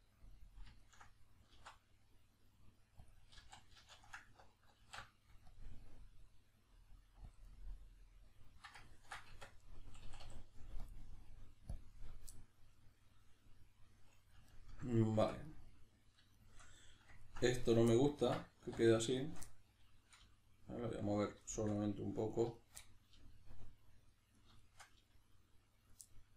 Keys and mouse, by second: 1.6 alt+s, 3.1 click, 3.4 ctrl+z, 7.4 click, 7.5-8.9 middle drag, 9.3 Tab, 9.3-10.8 middle drag, 10.0 a, 10.8-12.4 drag, 12.4-17.6 middle drag, 15.2 Tab, 17.6 right click, 17.9-19.0 ctrl+middle drag, 18.6 1, 19.0 right click, 19.2 shift+right click, 19.5-21.3 middle drag, 20.2 g, 21.3 click, 21.4 shift+middle click, 22.3 right click, 22.5 shift+right click, 22.8-24.1 middle drag, 23.1 g, 24.1 click, 24.3 right click, 24.6 shift+right click, 24.9 g, 25.9 click, 26.1-26.3 middle drag.